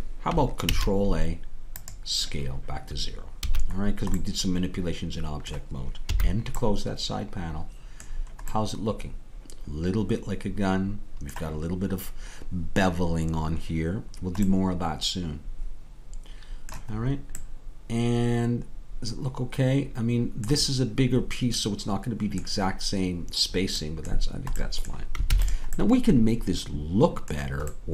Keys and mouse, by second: 0.7 ctrl+a, 3.4 a, 6.1 n, 7.2-9.7 middle drag, 14.6-17.9 middle drag, 22.2-27.9 middle drag, 25.3 ctrl+s.